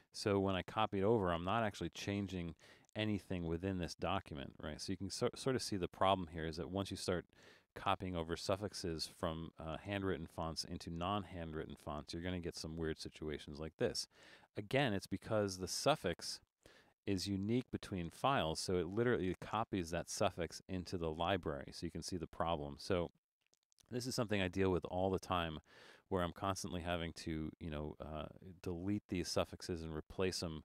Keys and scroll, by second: 16.3 Return.